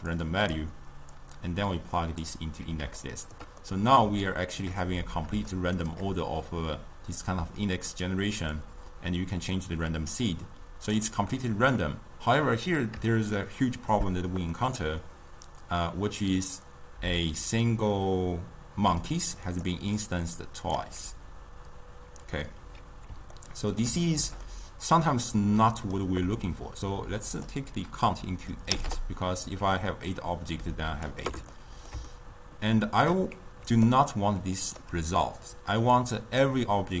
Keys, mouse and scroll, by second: 0.1-3.0 drag, 3.0-3.5 shift+middle drag, 3.5 scroll up 2, 3.7-5.5 middle drag, 5.5 scroll up 2, 5.6-8.5 shift+middle drag, 8.5-11.6 drag, 13.1-18.8 shift+middle drag, 18.8-21.3 typing, 19.1 click, 20.0 click, 23.3-27.3 ctrl+middle drag, 27.3-31.5 drag, 31.5-33.7 ctrl+middle drag, 33.7 d, 33.9 right click, 34.8 d.